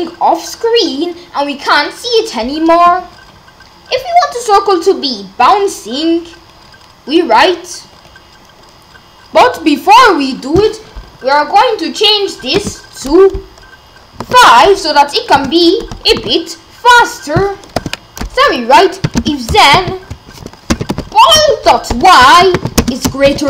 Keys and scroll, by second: 12.6 BackSpace, 14.2 5, 15.4 BackSpace, 16.1 5, 17.8 Return, 18.7-23.4 typing.